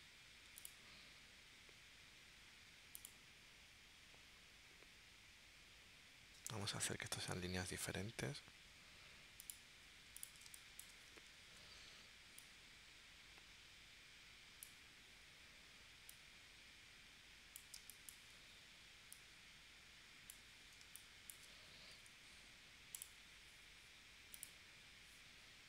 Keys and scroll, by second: 10.5 space, 11.4 shift+c, 17.8 space, 20.8 space, 21.9 a.